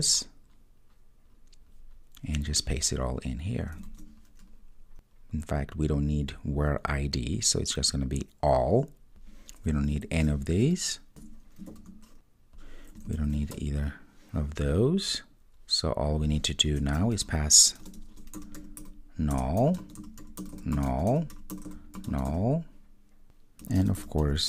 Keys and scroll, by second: 3.9 super+v, 19.4 Return.